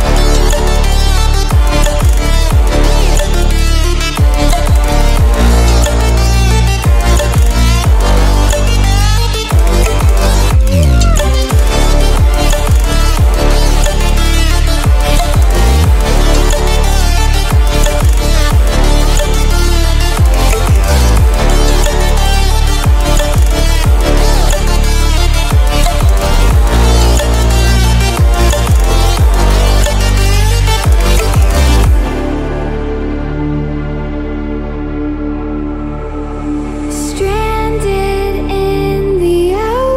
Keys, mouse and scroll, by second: 1.5-2.6 alt+shift+drag, 3.4-4.7 drag, 5.9-6.7 alt+scroll up 5, 9.4 alt+scroll up 1, 10.0 shift+m, 11.6-13.0 alt+scroll up 2, 13.4-15.2 drag, 15.9-17.3 alt+scroll down 2, 17.3 drag, 18.0 ctrl+scroll down 1, 19.6-21.5 drag, 22.1-22.6 alt+scroll down 2, 23.3 alt+scroll up 1, 24.2-25.7 drag, 26.1 scroll down 1, 27.5-28.4 drag, 28.8 ctrl+scroll up 1, 29.8-30.7 click, 31.0 ctrl+scroll up 1, 32.0-33.0 drag, 33.2 scroll up 1, 34.1-34.9 drag, 35.3 scroll up 1, 36.2-37.1 click, 37.3 scroll up 1, 37.6 ctrl+scroll down 1, 38.2-39.2 drag, 39.6-39.9 ctrl+scroll down 2.